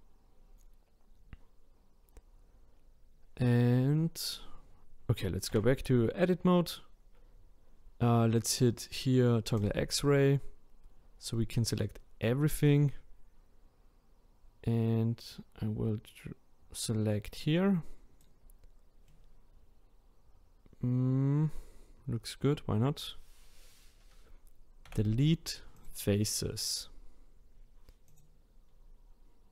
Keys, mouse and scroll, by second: 0.1-0.8 scroll down 3, 0.8-1.5 scroll up 2, 2.1-2.7 scroll down 4, 2.7-6.4 scroll down 1, 6.4 Tab, 9.5-10.9 drag, 10.9-12.2 scroll down 1, 12.6 click, 19.1-22.1 middle drag, 24.8 Delete, 28.1 click, 28.6-29.4 scroll up 5, 29.4-29.5 scroll up 3.